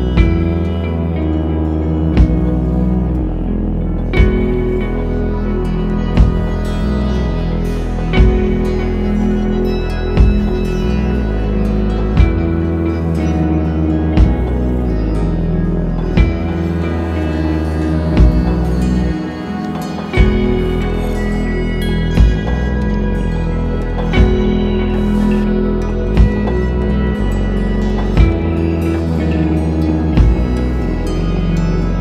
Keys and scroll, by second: 27.0 super+s, 27.7 Right, 27.8 BackSpace, 28.0 3, 28.3 Return.